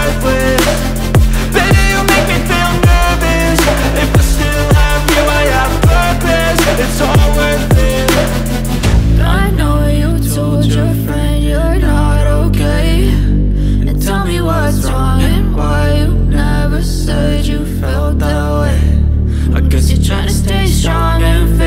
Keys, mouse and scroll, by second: 0.1 click, 0.1 click, 5.3 Tab, 6.8 click, 8.1 click, 18.2 typing, 19.8 click, 19.8 click.